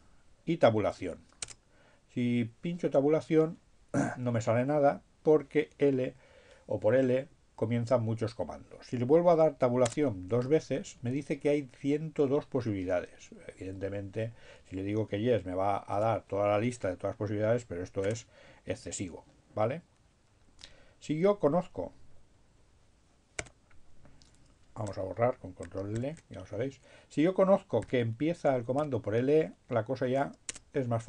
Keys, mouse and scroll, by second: 0.7 Tab, 8.7 Tab, 13.4 y, 17.1 space, 21.4 q, 24.1 BackSpace, 25.9 ctrl+l, 27.0 l, 28.6 e, 29.8 Tab.